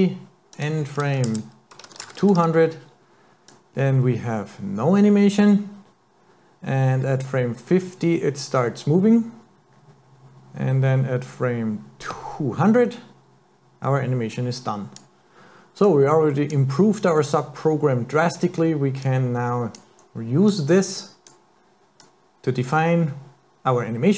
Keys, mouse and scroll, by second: 0.5 click, 2.4 KP_0, 3.5 click, 15.8 click, 19.0 click, 20.5 click, 22.0 click.